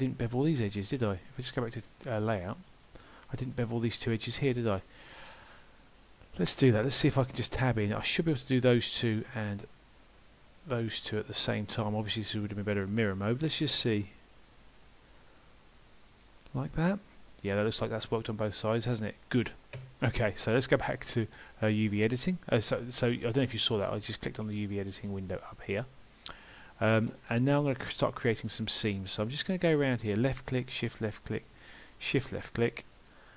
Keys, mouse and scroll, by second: 2.7 click, 4.7 middle click, 6.6 click, 7.0 Tab, 7.5 click, 8.4 shift+click, 8.8 middle click, 10.6 shift+click, 11.7 middle click, 13.8 ctrl+b, 16.7 middle click.